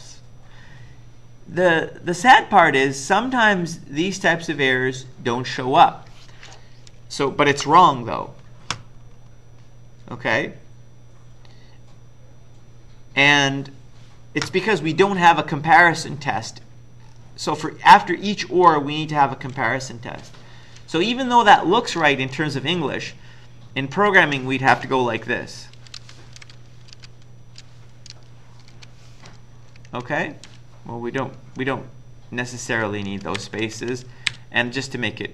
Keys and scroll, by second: 20.2 Left, 22.9 Left, 23.5 Left, 23.5 Left, 25.7-29.1 typing, 29.8 Left, 29.9 Left, 30.1 Left, 30.2-31.0 typing, 31.6 Left, 32.2 Left, 32.2 Left, 32.5-33.1 Left, 33.4 Delete, 33.6 Right, 33.8 Right, 34.3 Delete, 34.8 Right.